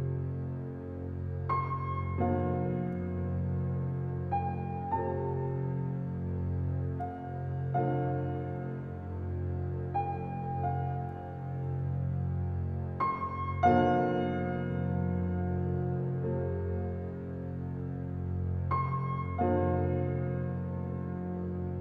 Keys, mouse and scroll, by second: 0.3 4, 3.3-4.0 scroll down 1, 4.0 -, 5.3 4, 6.3 shift+', 7.4 scroll down 1, 10.5 click, 10.7-11.2 scroll down 1, 11.6-12.5 scroll up 1, 12.5 right click, 13.8 click, 15.3-16.6 typing, 17.3 scroll down 1, 20.7 scroll up 1.